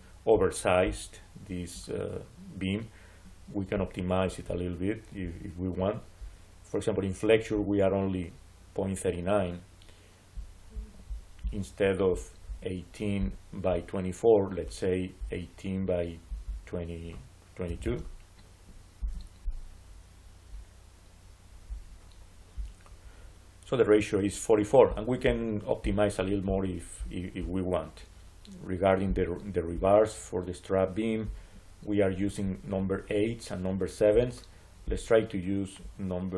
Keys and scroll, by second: 17.5 2, 18.9 Return.